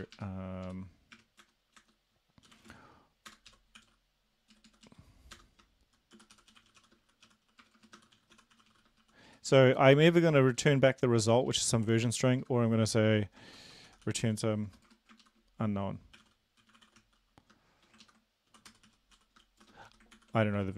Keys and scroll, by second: 0.0 BackSpace, 0.2 BackSpace, 0.7 Up, 1.2 BackSpace, 1.4 Return, 1.8 Return, 2.5-3.9 typing, 3.3 Return, 4.6 Down, 4.7 Down, 4.9 Down, 5.3 Return, 6.1-9.3 typing, 9.8 Left, 10.6 Down, 11.1 BackSpace, 11.5 Left, 12.1 Left, 12.4 Left, 13.5-14.9 typing, 15.2 ctrl+shift+Left, 16.2-17.0 typing, 18.0 ctrl+Left, 18.5-19.6 typing, 19.9 Right, 20.2 ctrl+s, 20.6 End.